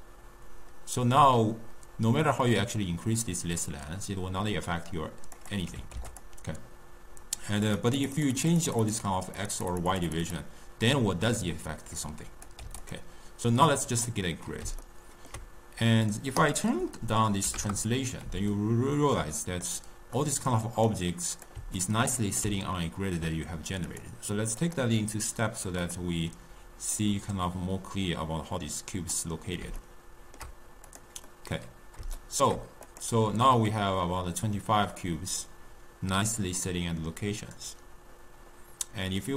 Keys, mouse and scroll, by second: 5.4 click, 7.6-12.9 drag, 13.6-16.3 middle drag, 16.3-18.4 drag, 18.4-20.7 ctrl+middle drag, 20.7 drag, 21.7-23.8 ctrl+middle drag, 23.8-25.8 drag, 26.9-29.7 drag, 29.7-30.7 shift+middle drag, 30.7 click, 31.2-32.7 middle drag, 32.7 click.